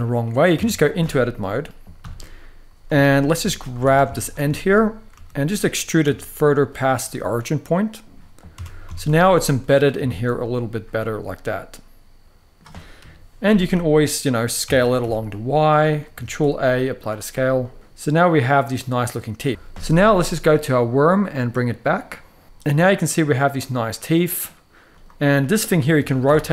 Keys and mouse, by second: 0.3 Tab, 1.7 KP_3, 2.8 shift+middle click, 3.1 z, 3.6 alt+a, 4.3 shift+middle drag, 4.9 r, 5.6 click, 5.8 e, 8.3 Tab, 8.6 z, 9.1-9.6 middle drag, 9.8 shift+middle drag, 10.7-12.3 middle drag, 12.7 KP_3, 14.4 s, 14.7 y, 15.9 ctrl+a, 17.3-19.4 middle drag, 18.3 alt+a, 21.6 click, 22.4-24.2 middle drag, 24.6 click, 25.0 middle click, 25.7 r, 26.0 y.